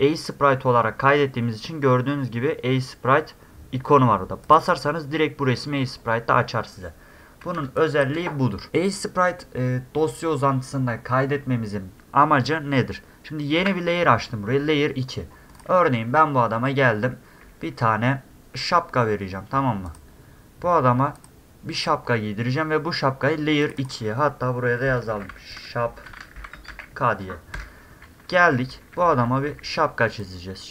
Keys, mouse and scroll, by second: 4.4 click, 4.6 click, 5.9 middle click, 7.0 middle click, 7.6 space, 7.8 drag, 15.5 click, 16.3 middle click, 17.4 s, 19.9 click, 21.2 click, 21.8 click, 23.6 click, 23.8 click, 26.2 a, 26.7 a, 28.7 e, 29.3 w, 30.2 click.